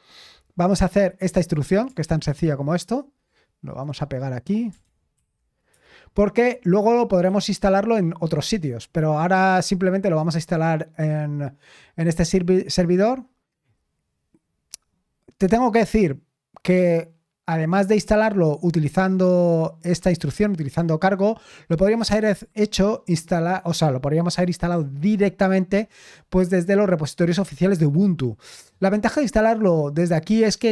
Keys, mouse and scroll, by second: 0.0-0.4 typing, 0.6 click, 1.2 click, 2.0 ctrl+c, 2.3-3.0 typing, 3.8 click, 4.7-8.8 typing.